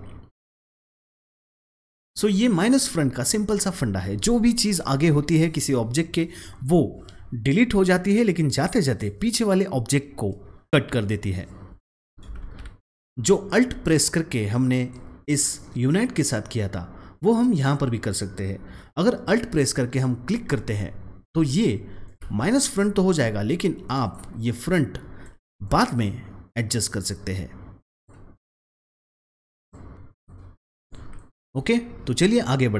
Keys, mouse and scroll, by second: 12.3 ctrl+z, 12.8 click, 14.0-14.8 drag, 19.2 alt+Num_Lock, 19.2-22.0 drag, 24.0 double click, 24.6-29.6 drag.